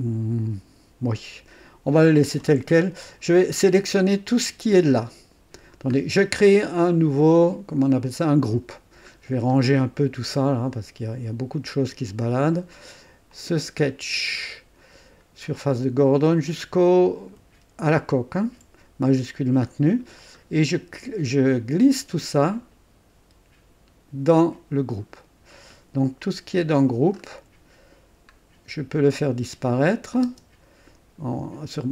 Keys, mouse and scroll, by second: 3.4 click, 4.9 scroll up 2, 8.0 click, 9.1 scroll up 2, 11.0 scroll down 2, 13.3 click, 13.9-14.4 scroll down 2, 18.1 shift+click, 20.1-20.4 scroll down 2, 22.4-24.3 drag, 25.1-25.7 scroll down 2, 26.7 click, 27.1-27.9 scroll down 2, 30.2 space.